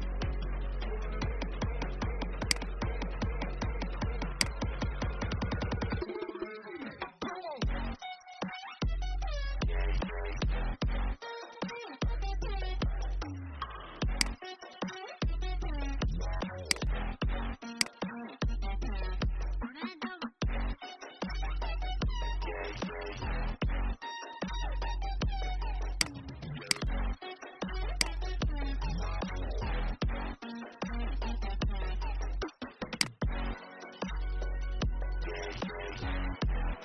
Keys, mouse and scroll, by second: 0.3-0.8 scroll up 1, 1.1-2.3 alt+scroll down 1, 2.3 click, 6.8-7.2 shift+scroll, 14.1 click, 18.9-19.5 Up, 25.9 click, 27.8 shift+click, 36.5 Up.